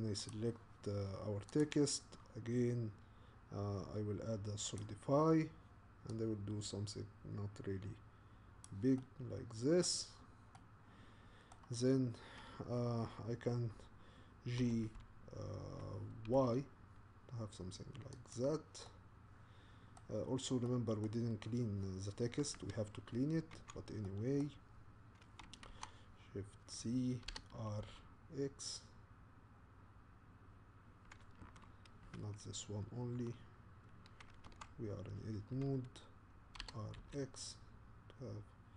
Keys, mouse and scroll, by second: 0.3 click, 6.8-9.0 drag, 9.0-10.1 middle drag, 10.1-10.5 scroll down 1, 10.5-14.6 middle drag, 14.6 g, 18.3-20.2 middle drag, 20.2-20.7 scroll up 1, 20.7-23.6 middle drag, 23.6 Tab, 24.0 middle click, 24.7-25.7 scroll down 2, 25.7 shift+z, 27.3 r, 34.5 Tab, 36.6 r, 36.9 middle click, 38.5-38.7 middle drag.